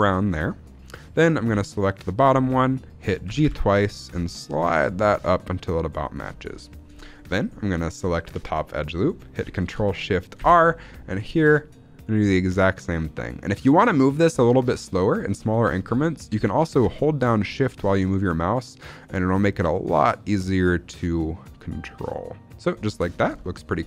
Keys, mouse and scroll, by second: 0.1 click, 2.0 alt+click, 2.3-3.8 scroll up 2, 3.8 g, 5.9 click, 6.3 scroll down 2, 6.7 shift+middle click, 8.4 alt+click, 10.4 ctrl+shift+r, 22.7 shift+click, 23.0 scroll down 2, 23.3 shift+middle click, 23.5-23.8 scroll up 4.